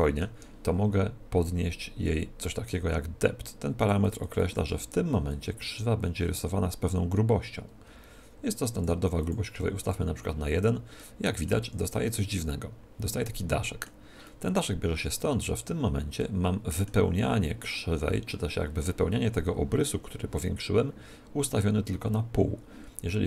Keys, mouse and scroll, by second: 3.7-7.0 drag, 9.1-10.9 drag, 10.9-13.7 middle drag, 11.5 z, 14.2-16.0 middle drag, 16.2-17.9 middle drag.